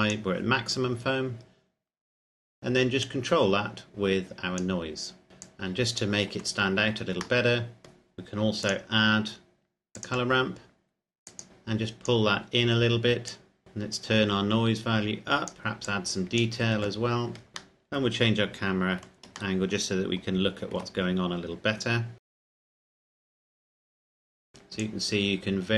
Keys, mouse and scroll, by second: 1.9-3.0 scroll down 1, 3.0 click, 5.3-5.6 scroll down 1, 5.6 click, 7.6 shift+middle click, 8.9 click, 18.0 middle click, 20.0 shift+middle click, 21.3-21.7 scroll up 1, 22.3 scroll down 1, 22.6 middle click, 23.6 click, 24.1 click, 25.3 click.